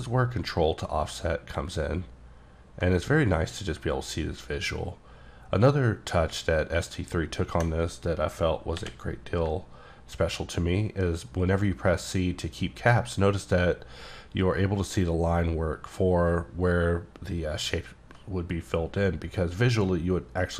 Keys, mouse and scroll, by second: 8.8 c.